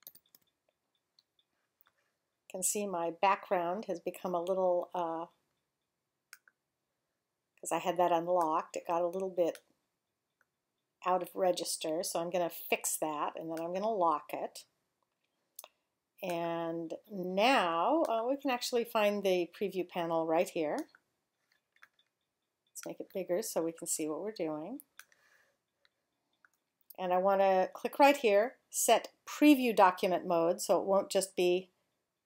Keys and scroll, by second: 0.1 alt+super+0.